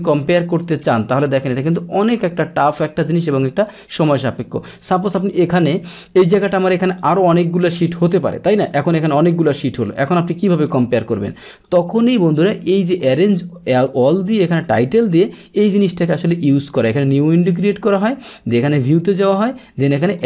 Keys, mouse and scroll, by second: 0.8-4.4 drag, 5.2-7.0 drag, 7.0 right click, 8.1 click, 8.7 click, 9.8-11.6 drag, 11.9 click, 12.9 click, 14.5 click, 16.1 click, 16.7 click, 18.7 click, 20.1 click.